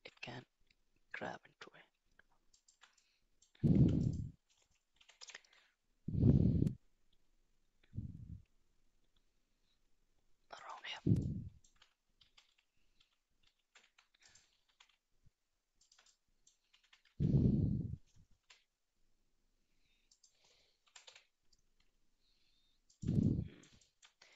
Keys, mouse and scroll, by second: 3.0 middle click, 3.8 Tab, 4.1 click, 5.0 g, 11.2 middle click, 12.2 ctrl+z, 12.5 ctrl+z, 13.0 ctrl+z, 13.4 ctrl+z, 13.8 Tab, 14.7 s, 16.2 middle click, 16.9 s, 20.8 g, 23.2 middle click, 23.8 shift+middle drag.